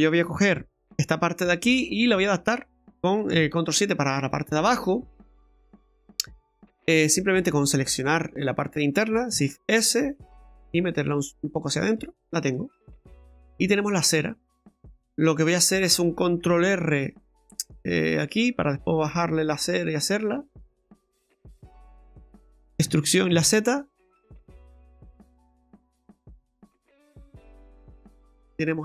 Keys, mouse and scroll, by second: 0.9 Tab, 1.5 middle click, 3.3 ctrl+KP_7, 4.1 scroll up 4, 6.9 Tab, 7.9 alt+shift+right click, 8.6-9.3 scroll down 1, 9.3 scroll down 1, 9.5 shift+s, 10.6 s, 12.2-12.5 scroll down 2, 12.5 middle click, 13.5 scroll up 2, 13.9 middle click, 14.3 shift+middle click, 16.8 ctrl+r, 21.5 alt+shift+right click, 22.2 alt+shift+right click, 22.8 e, 28.0-28.4 scroll down 4, 28.5 middle click.